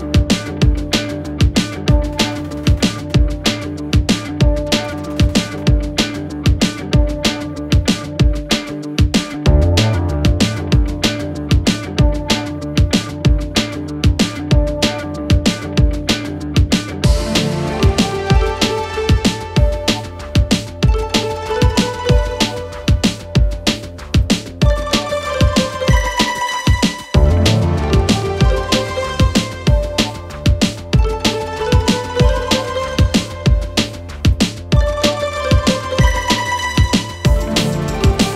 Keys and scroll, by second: 3.1 ctrl+v, 8.3 Up, 13.3 Delete, 14.1 Delete, 17.5 Escape, 34.1 Escape, 36.3 Escape.